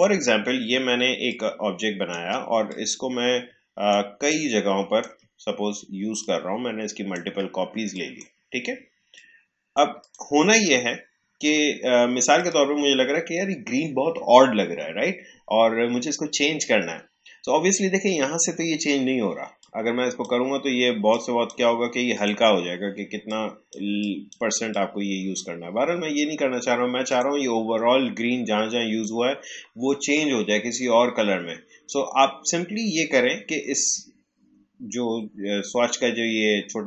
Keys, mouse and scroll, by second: 4.2-6.1 alt+drag, 6.1-7.9 shift+drag, 12.3 click, 19.5-27.0 drag.